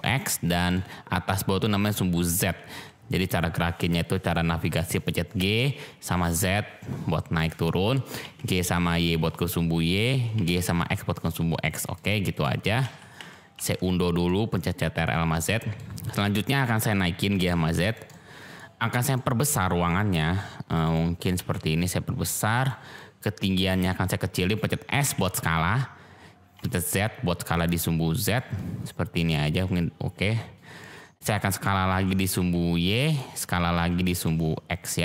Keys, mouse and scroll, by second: 0.5 middle click, 2.2 middle click, 3.2 click, 5.3 g, 6.0 z, 7.3 click, 8.2 g, 8.6 y, 9.9 click, 10.3 g, 10.5 x, 11.7 click, 12.3 click, 12.8 ctrl+z, 13.5 ctrl+z, 14.2-14.6 drag, 15.4-15.8 drag, 16.0 click, 17.2 g, 17.3 z, 17.9 click, 18.1-18.5 drag, 19.1-19.4 drag, 19.8 click, 20.9 middle click, 21.3 s, 22.6 click, 22.9 middle click, 25.0 s, 26.5 z, 28.2 click, 28.5-30.5 middle drag, 30.7-31.1 middle drag, 31.8 s, 32.3 y, 33.1 click, 33.7 s, 34.0 x.